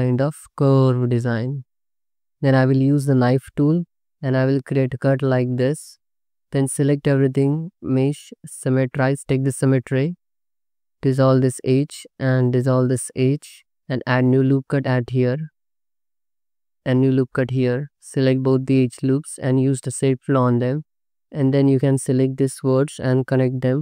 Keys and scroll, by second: 0.8 alt+shift+z, 1.9 1, 4.4 c, 4.8 space, 6.4 ctrl+z, 6.5 a, 10.5 2, 11.3 ctrl+x, 12.6 ctrl+x, 14.1 ctrl+r, 16.9 ctrl+r, 21.8 1.